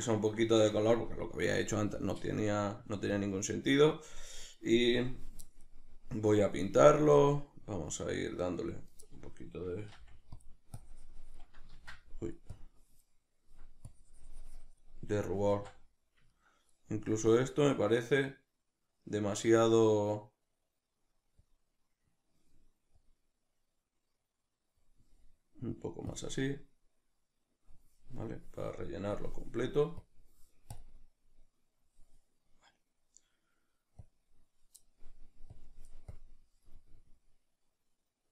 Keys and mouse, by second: 5.1-10.4 drag, 10.0 f, 11.8 ctrl+z, 11.8-15.6 drag, 15.5 ctrl+z, 15.6-17.6 ctrl+middle drag, 17.6 click.